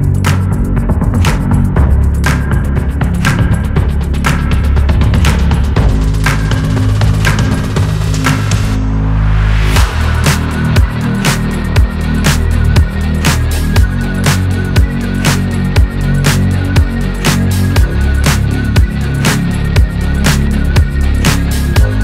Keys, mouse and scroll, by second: 0.5 /, 0.9 middle drag, 1.1 click, 1.3 scroll down 2, 1.4-2.5 middle drag, 2.5-2.8 scroll up 1, 2.8-4.4 middle drag, 4.6-5.2 middle drag, 5.2-5.6 scroll down 2, 5.6-7.2 middle drag, 9.5 click, 9.9 /, 10.1 middle drag, 10.3 scroll up 1, 10.6 middle drag, 10.9 scroll down 1, 11.0 shift+middle click, 11.7 click, 12.3 Tab, 12.5 middle click, 13.0 click, 13.7 middle click, 14.3-14.9 scroll up 1, 14.9 scroll up 1, 15.0 ctrl+click, 15.5 ctrl+KP_Add, 15.7 ctrl+KP_Add, 17.4-18.3 drag, 18.3 Tab, 18.9-22.0 drag.